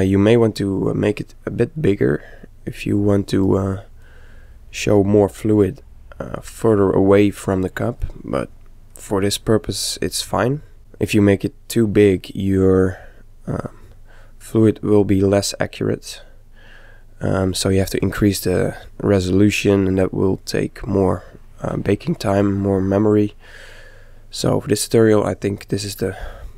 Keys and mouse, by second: 1.9-3.7 middle drag, 8.2-10.1 middle drag, 16.5-18.2 middle drag, 20.4-22.2 middle drag, 22.9-26.2 middle drag.